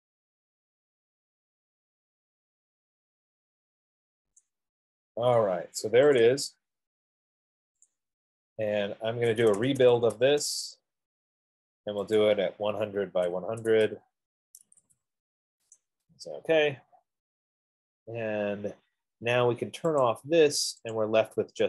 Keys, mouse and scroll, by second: 7.3-8.0 scroll, 8.3 click, 9.7-10.4 typing, 10.1 middle click, 10.6 Return, 12.8 click, 13.0-15.0 typing, 16.1-17.0 typing, 20.7 click.